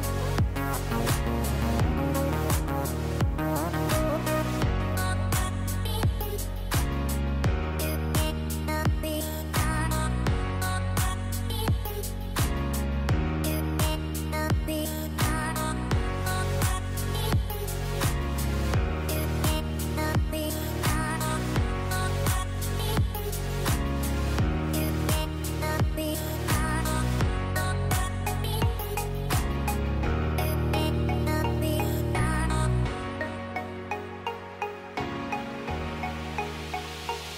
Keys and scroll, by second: 9.0 p, 13.1 shift+Page_Down, 34.4 ctrl+c.